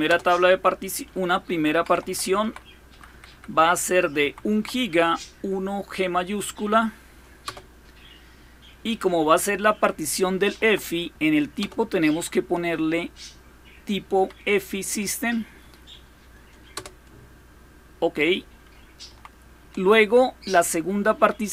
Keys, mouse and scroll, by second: 1.3 Left, 1.5 Left, 1.7-2.0 Left, 2.2 Left, 2.7 Delete, 2.9 Delete, 3.1 Delete, 3.3 Delete, 4.0 Right, 4.3 Right, 7.2 Return, 10.4 Right, 11.4 Return, 12.5 Up, 13.2-14.1 Up, 16.5 Return, 18.9 Down.